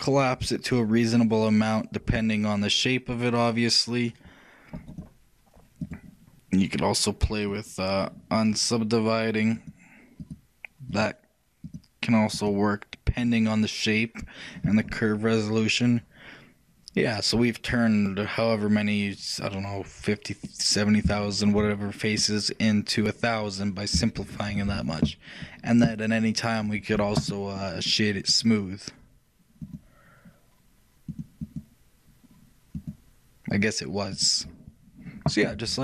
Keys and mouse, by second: 6.2-9.3 drag, 9.7-15.2 drag, 15.0 middle click, 15.2-19.2 middle drag, 20.8-27.0 shift+middle drag, 22.7 shift+click, 27.0 t, 32.0-35.8 drag.